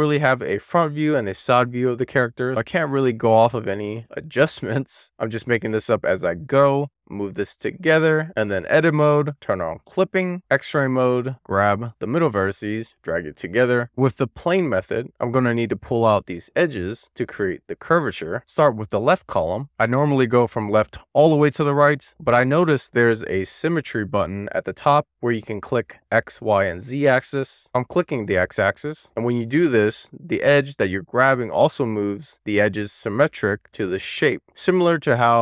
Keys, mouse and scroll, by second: 1.9 a, 2.9 click, 8.6 click, 9.5 click, 10.6 alt+z, 11.0 click, 11.9 click, 12.5 middle click, 12.9 scroll down 1, 13.5 scroll up 1, 13.6 alt+z, 14.2 shift+middle click, 14.5-15.9 middle drag, 16.1 scroll down 1, 16.4 middle click, 17.4 middle click, 19.3 alt+shift+click, 19.8-23.7 middle drag, 24.0 alt+middle click, 24.8 scroll up 1, 25.1 Tab, 25.5 Tab, 26.6 1, 27.9 click, 28.9 click.